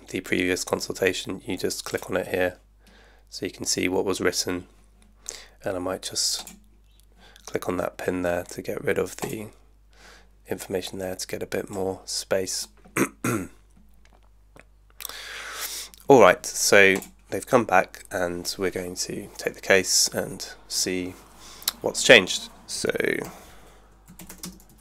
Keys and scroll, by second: 23.0-24.8 typing.